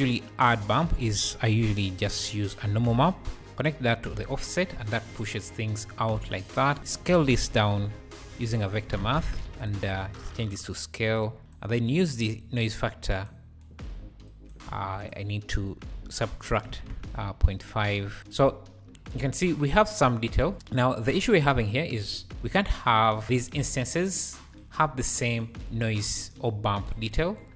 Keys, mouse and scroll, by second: 1.1 shift+a, 3.5-4.2 drag, 4.7-5.1 scroll down 4, 6.8 shift+a, 8.4 BackSpace, 10.1 click, 10.5-13.2 drag, 14.3 click, 14.7 shift+a, 17.0-20.5 drag, 18.3 scroll down 1, 18.5 `, 19.0 scroll up 4, 19.1 `, 20.2 `, 20.5 alt+a, 20.5-21.1 scroll up 8, 21.7 scroll down 2, 22.0 `, 22.3 scroll up 1, 23.2-24.4 ctrl+shift+drag.